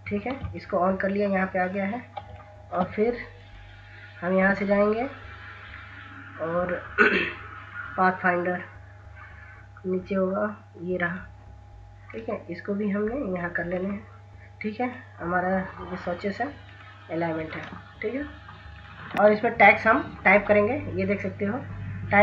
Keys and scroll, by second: 1.9 ctrl+s.